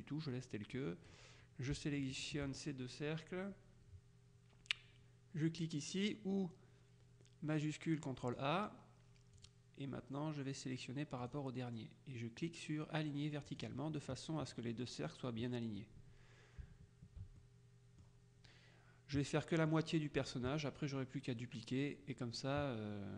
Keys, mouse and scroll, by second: 2.3 shift+click, 8.3 click, 9.5 click, 11.3 click, 13.6 click, 17.5-18.6 shift+middle drag, 19.5 middle click.